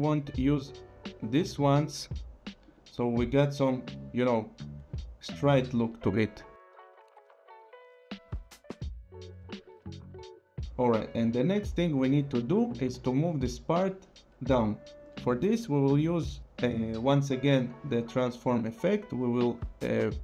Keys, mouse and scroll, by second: 0.2 click, 1.7-2.0 scroll, 2.7 click, 3.0 scroll, 7.5 click, 8.4 click, 9.3 click, 17.5 click.